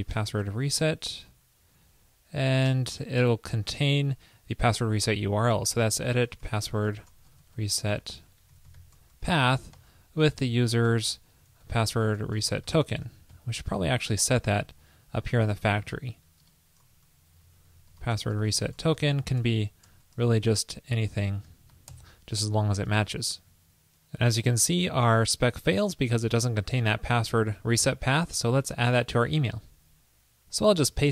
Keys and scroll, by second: 1.5 alt+Left, 2.2 alt+shift+Right, 15.8 alt+Left, 20.1 ctrl+l, 23.2 super+s, 30.9 super+a.